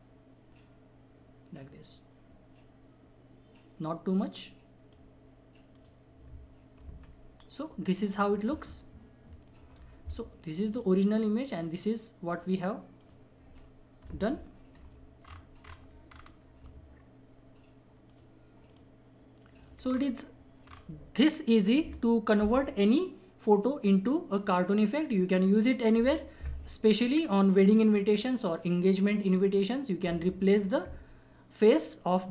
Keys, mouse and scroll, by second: 7.0 ctrl+-, 8.6 ctrl+-, 10.7 click, 14.2 ctrl+=, 15.2 scroll up 1, 18.1 alt+click, 19.3 alt+click, 19.8-20.6 scroll up 1.